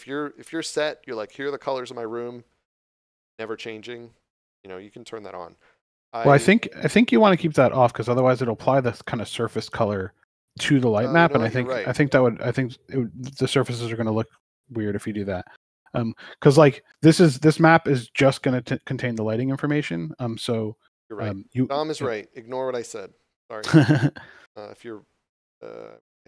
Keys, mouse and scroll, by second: 7.7 scroll down 1, 23.3 scroll down 1.